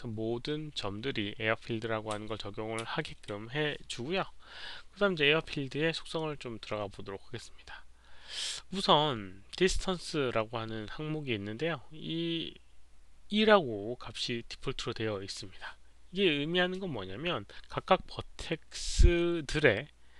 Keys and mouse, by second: 2.8 ctrl+a, 4.3 ctrl+a.